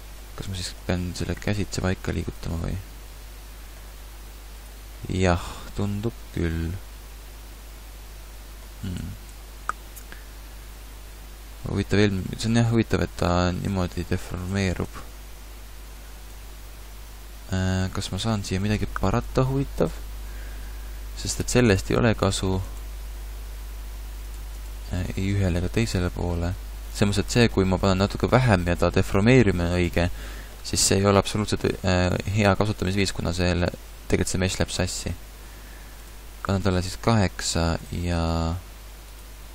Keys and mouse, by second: 1.0 g, 3.9 g, 9.0 ctrl+z, 9.3 ctrl+z, 13.0 Tab, 13.7 Tab, 14.5 Tab, 14.9 Tab, 16.3 Tab.